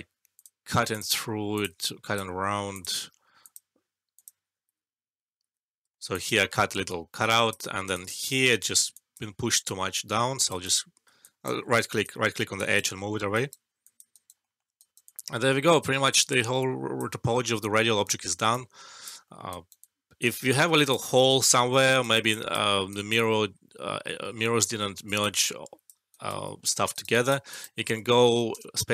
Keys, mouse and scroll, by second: 1.8 alt+click, 5.9 alt+middle click, 6.1 alt+click, 7.2 alt+click, 7.6 alt+middle click, 7.8 alt+right click, 8.2 alt+click, 8.9 alt+click, 9.6-10.5 right click, 10.6-11.0 alt+click, 11.1 alt+click, 12.0-12.9 right click, 13.8 alt+click, 14.0 alt+right click, 14.4 alt+middle click, 14.7 alt+right click, 15.0-16.8 alt+drag, 18.4-19.1 alt+click, 19.2 alt+middle click, 19.4 alt+right click, 19.7-20.7 alt+click, 20.7 alt+right click, 21.0-21.6 alt+click, 21.7 alt+middle click, 21.9 alt+right click, 22.2 alt+click, 22.6 alt+middle click, 22.8 alt+right click, 25.0 alt+right click, 25.3-25.9 alt+click, 26.0 alt+right click, 26.5 alt+middle click, 26.9 alt+right click, 27.7 alt+middle click, 28.5 space.